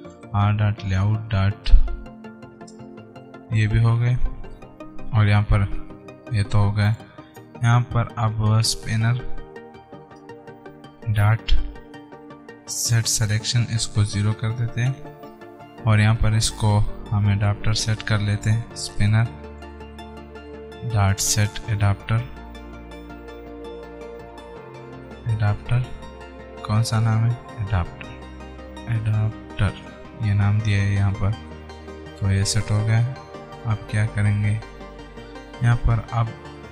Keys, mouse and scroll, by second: 4.6 Return, 7.1 click, 7.6 Return, 8.5-9.1 typing, 10.4 Return, 10.7 ., 12.8 Down, 13.6 Return, 14.6 0, 15.4 alt+Tab, 16.5 Return, 35.1 alt+Tab.